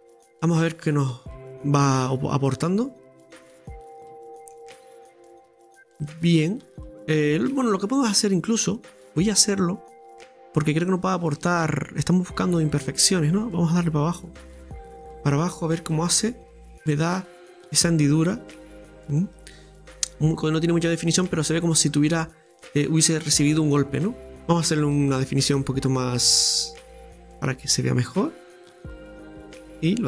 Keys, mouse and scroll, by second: 0.5-2.8 middle drag, 2.8-3.9 drag, 3.9 Tab, 4.2-4.7 scroll down 3, 4.5 middle click, 4.8-7.4 middle drag, 7.5 Tab, 7.7 scroll up 2, 8.3 scroll up 1, 8.3-10.5 shift+middle drag, 10.6-11.6 drag, 11.6 right click, 12.0 middle click, 12.7 click, 15.4 Tab, 16.0 scroll down 2, 16.2 middle click, 16.9 right click, 17.4-19.4 middle drag, 19.8 click, 19.9-21.9 middle drag, 21.9-22.3 scroll down 4, 22.3-23.8 middle drag, 23.8 scroll down 2, 24.0 middle click, 24.9 ctrl+r, 27.1 ctrl+r.